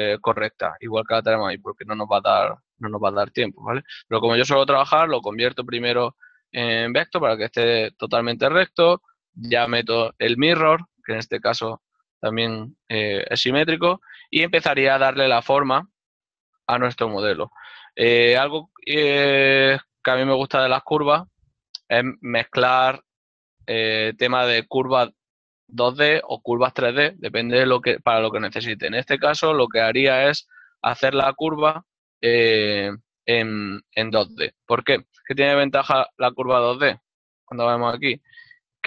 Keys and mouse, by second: 2.0 click, 2.1 n, 3.6 shift+middle click, 5.4 v, 7.6 ctrl+middle click, 8.6 g, 8.8 click, 13.9 shift+middle click, 16.8 right click, 17.2 typing, 17.4 ctrl+middle click, 20.1-21.4 typing, 20.7 shift+middle click, 23.0 click, 24.6-25.5 typing, 26.0 click, 27.8 right click, 30.7 e, 33.0 y, 34.5 Tab.